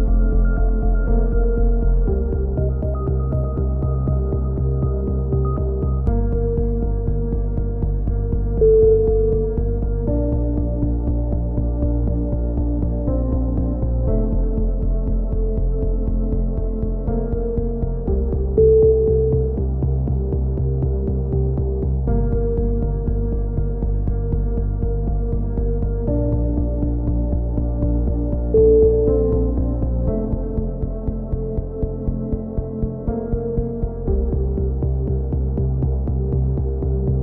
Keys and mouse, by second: 1.7 f, 2.4 f, 3.2 f, 3.4 middle click, 3.4 a, 3.6 Tab, 3.9 middle drag, 7.7 Tab, 7.9-9.0 drag, 9.3-10.8 drag, 10.8-13.5 middle drag, 13.5 drag, 13.8 Tab, 14.7 KP_3, 15.3 z, 16.0-17.0 middle drag, 17.2-26.8 middle drag, 29.6 s, 30.0 s, 31.0-31.6 drag, 31.5 a, 32.1 c, 33.1-34.4 drag, 34.4-35.5 right drag, 34.5 g, 35.5 a, 35.6 c, 36.5-37.2 right drag, 36.5 g.